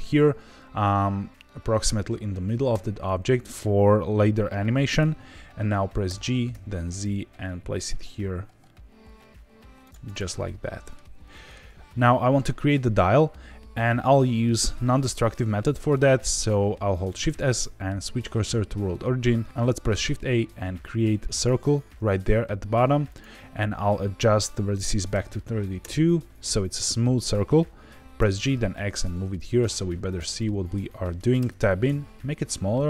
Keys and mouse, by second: 2.7 Tab, 6.0 g, 6.5 z, 9.8 click, 10.0-10.9 middle drag, 11.3 middle click, 11.6 z, 17.0 shift+s, 19.3 shift+a, 20.0 shift+a, 23.1-26.2 drag, 28.1 g, 28.4 x, 30.0 click, 30.3 shift+middle click, 30.8 middle click, 31.3 Tab, 31.8 s.